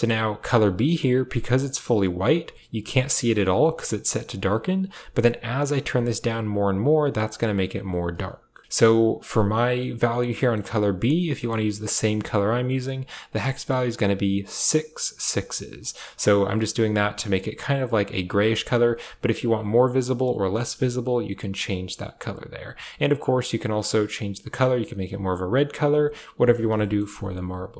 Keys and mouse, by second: 0.3 click, 4.2 click, 8.6 ctrl+v, 10.2 click, 11.4 click, 11.9 click, 16.7 click, 22.6 click, 26.8 shift+middle click.